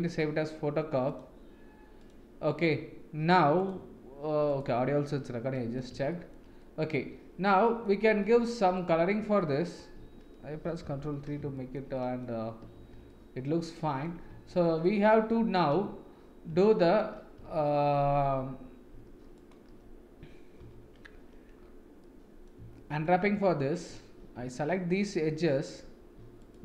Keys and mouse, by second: 5.5 middle click, 6.1 shift+middle click, 6.6-7.8 middle drag, 8.2-9.2 middle drag, 9.4 middle click, 10.9 ctrl+3, 11.5 shift+middle drag, 11.9 middle drag, 12.7 ctrl+s, 13.0-14.0 middle drag, 14.2 Tab, 14.8-15.2 middle drag, 16.6 shift+middle drag, 19.3 alt+click, 20.6 2, 22.0 middle click, 22.8 shift+middle click, 23.3 middle click.